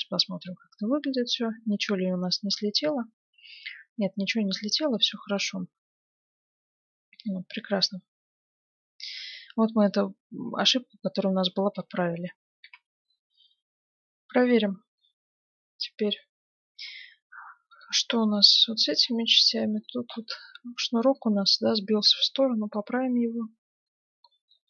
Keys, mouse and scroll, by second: 5.0-7.4 middle drag, 9.9-11.7 middle drag, 12.7 F9, 18.0-19.4 right drag, 18.6-21.0 middle drag, 23.8-24.6 middle drag.